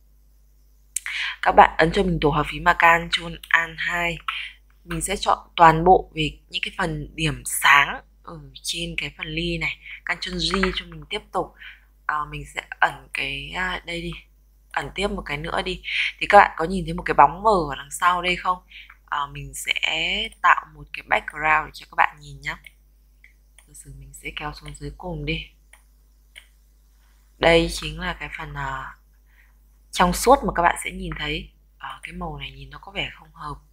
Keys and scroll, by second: 2.6 ctrl+alt+shift+2, 10.0 ctrl+j.